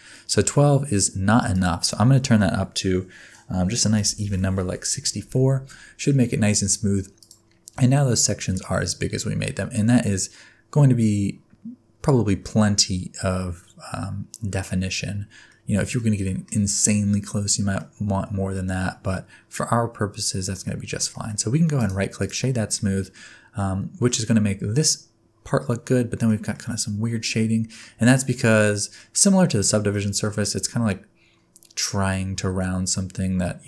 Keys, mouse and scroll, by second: 1.5 click, 5.7 middle click, 6.1-7.2 scroll up 4, 7.2 click, 7.2-8.2 scroll up 3, 8.2 middle click, 9.3 scroll down 4, 10.6-11.2 scroll up 2, 15.1-15.5 scroll down 4, 15.5 middle click, 16.2 middle click, 16.9-17.4 scroll up 3, 17.4-17.8 scroll down 4, 17.8 middle click, 21.1 middle click, 21.3-21.7 scroll up 4, 21.7 right click, 22.7 middle click, 23.2 scroll down 2, 23.5 middle click, 25.4 scroll down 1, 25.6 middle click, 26.5 middle click, 27.9-28.4 scroll up 5, 28.6 middle click, 29.7 middle click, 30.2 middle click, 30.5-31.4 scroll up 2.